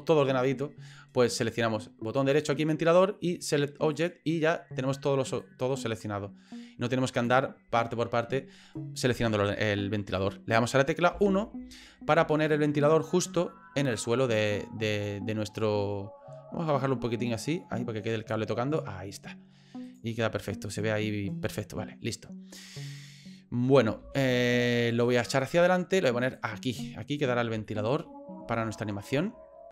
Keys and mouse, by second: 2.2-4.1 right drag, 5.4-7.3 drag, 11.1 KP_1, 12.3 shift+middle click, 14.0-18.3 drag, 18.9 middle click, 19.8 right click, 20.2 middle click, 21.4 middle click, 22.5 middle click, 24.0 ctrl+z, 25.1-26.4 drag, 26.7 middle click, 27.7 shift+middle click, 28.5 shift+middle click.